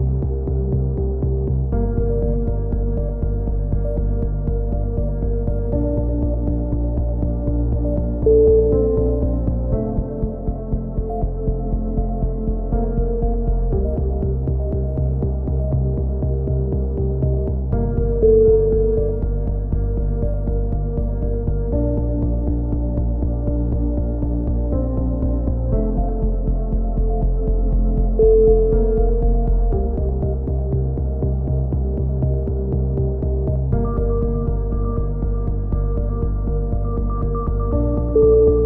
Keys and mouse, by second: 0.3 middle click, 0.6 click, 2.5 right click, 3.0 click, 3.4-4.7 middle drag, 4.7 click, 6.7-8.2 right drag, 7.9 click, 9.1 a, 9.2-10.2 middle drag, 10.2 right click, 10.7 click, 11.1 middle click, 11.5-12.8 right drag, 12.1 click, 12.6 ctrl+z, 13.0-14.2 right drag, 13.6 click, 14.9 middle click, 14.9 a, 15.4-16.6 right drag, 16.6 middle click, 17.6-18.6 drag, 20.1 middle click, 20.4 click, 20.9 right click, 21.4 click, 22.0 middle click, 22.8 click, 24.8 a, 25.4 right click, 25.7 click, 26.2 click, 27.0 right click, 27.2 click, 27.9 a, 28.4-29.4 drag, 29.5 click, 30.1-31.4 right drag, 31.5 v, 32.1 right click, 33.7 a, 33.9-35.2 right drag, 36.7 click, 36.7 shift+q, 36.9 a, 37.2 z.